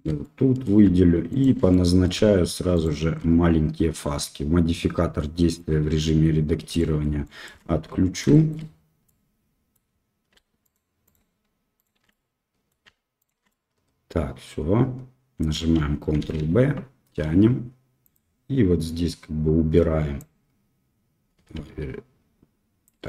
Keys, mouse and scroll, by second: 0.2 middle click, 1.3 alt+shift+click, 1.6 middle click, 2.7 alt+shift+click, 5.4 click, 6.7 shift+click, 7.2 shift+click, 8.3 shift+middle click, 9.0 middle click, 10.6 alt+shift+click, 11.0 alt+shift+click, 12.0 middle click, 13.1 alt+shift+click, 13.4-15.5 middle drag, 16.1 ctrl+b, 20.2-23.0 drag.